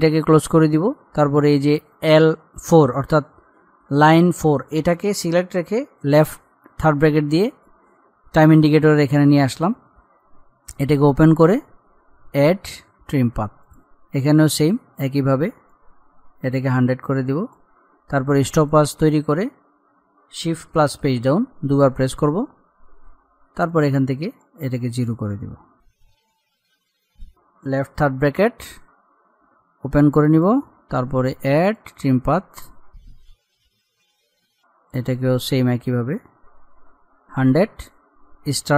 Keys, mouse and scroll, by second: 0.6 click, 6.9 [, 10.8-18.7 drag, 21.0 shift+Page_Down, 23.7 click, 26.1-26.7 scroll up 1, 26.9 click, 28.4 [, 30.3 click, 33.5-33.9 scroll down 1, 33.9 click, 34.1-35.1 scroll down 1, 35.1 scroll up 1, 35.2-38.5 drag.